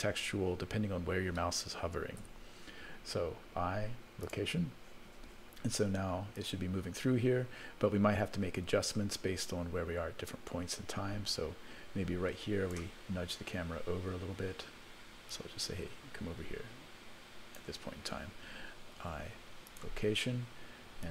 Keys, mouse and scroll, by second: 6.4-12.7 drag, 13.7 scroll up 1, 15.2 scroll up 2, 15.3-17.6 drag, 21.0-21.1 drag.